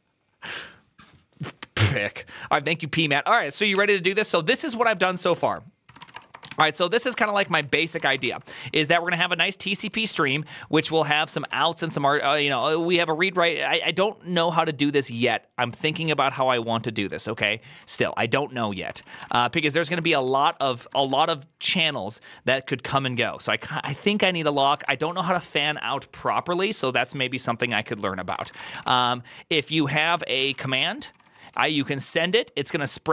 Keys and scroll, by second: 5.2 ctrl+c, 5.3 ctrl+c, 5.6-12.9 typing, 7.2 Return, 7.4 ctrl+c, 7.8 ctrl+;, 7.9 Return, 8.1 ctrl+d, 18.8 ctrl+c, 18.8-21.3 typing, 22.7-25.0 typing, 28.0-33.1 typing.